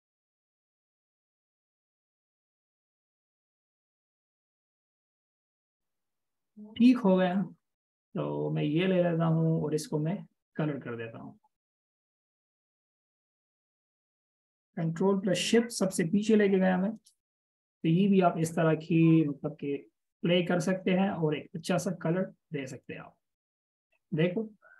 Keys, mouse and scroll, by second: 2.5 click, 3.5 right click, 3.9 Right, 4.7 Left, 5.3-5.7 scroll up 1, 6.7 double click, 16.7 ctrl+shift+[.